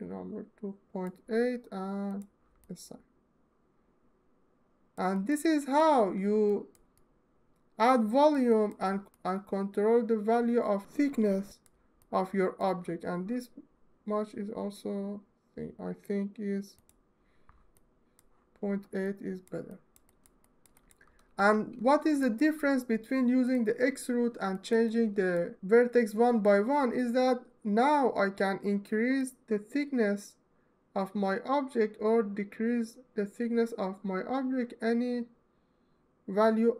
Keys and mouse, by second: 2.3 alt+middle click, 2.9 alt+middle click, 3.7 alt+middle click, 5.0 alt+middle click, 5.3 alt+middle click, 6.1 alt+middle click, 6.6 alt+middle click, 8.0 alt+shift+middle click, 9.0 alt+click, 9.5 alt+click, 10.4-11.5 alt+right drag, 17.6 alt+middle click, 18.7 alt+middle click, 19.7-20.1 alt+shift+middle drag, 20.3 alt+middle drag, 20.9 Tab, 24.7 middle click, 36.0-36.7 drag.